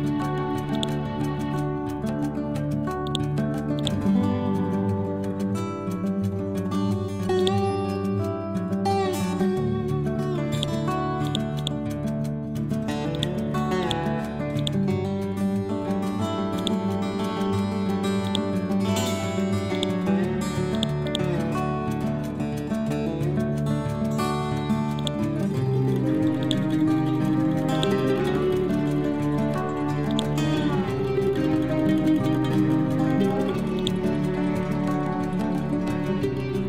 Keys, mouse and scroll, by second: 1.2 scroll down 1, 3.1-5.0 drag, 5.0 scroll up 1, 6.2 scroll down 1, 6.9 scroll up 1, 7.4-9.4 drag, 9.4 ctrl+Home, 10.5 click, 11.6 right click, 13.2 click, 15.2 ctrl+z, 16.6-18.3 shift+drag, 18.3 shift+right click, 19.7 click, 21.4-23.7 drag, 23.7 ctrl+Home, 25.0 click, 25.7 scroll up 1, 26.4 click, 26.9 ctrl+z, 27.8 click, 28.5 scroll up 1, 30.1-32.1 drag, 32.1 scroll down 1, 32.6 scroll up 1, 33.8-35.6 drag, 35.6 scroll down 1.